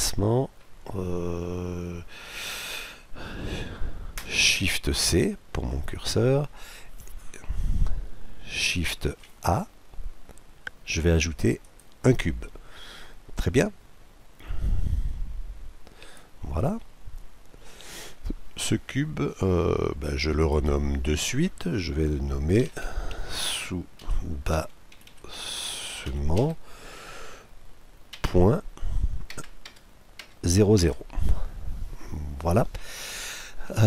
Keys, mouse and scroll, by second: 4.8 shift+c, 9.0 shift+a, 13.5-15.3 drag, 15.4 click, 16.8-18.8 middle drag, 20.4-22.4 drag, 25.1 s.